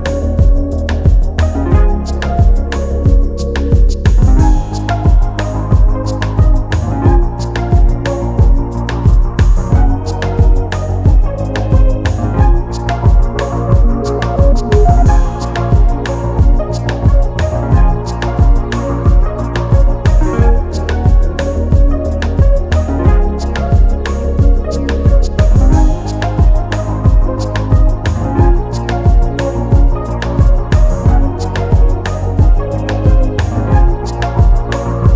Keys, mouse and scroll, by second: 0.5 click, 3.3 scroll up 1, 3.5 click, 4.2 scroll down 1, 4.7 click, 7.5 click, 8.0 scroll down 1, 8.3 scroll up 1, 8.3 scroll down 1, 8.4 scroll up 1, 9.1 click, 17.0 scroll down 1, 18.1 click, 18.3 scroll down 1, 19.2 click, 21.6-21.9 scroll down 1, 21.9 scroll up 1, 22.2 click, 23.5 click, 27.4 scroll up 1, 27.7 click.